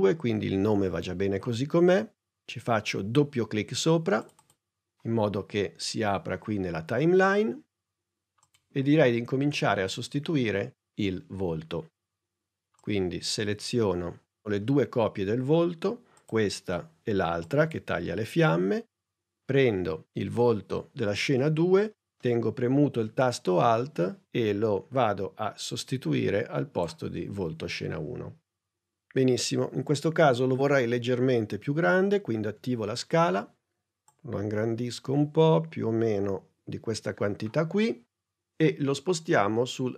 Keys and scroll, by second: 32.4 s.